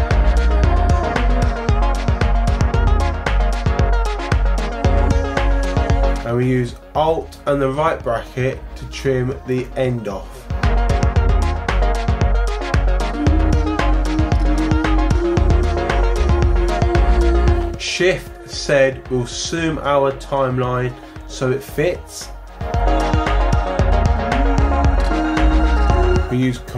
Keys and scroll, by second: 9.4 alt+], 18.5 shift+z.